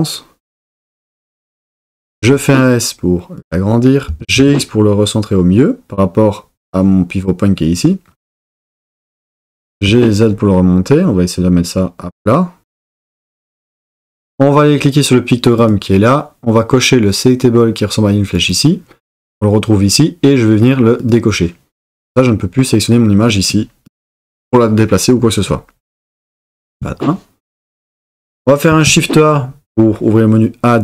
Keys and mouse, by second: 2.2 s, 3.4 click, 4.1 g, 4.4 x, 6.6 click, 8.6 g, 8.7 x, 9.4 click, 9.5 g, 10.0 z, 13.4 click, 15.6-18.8 drag, 21.0 click, 26.1 KP_1, 28.7 shift+a.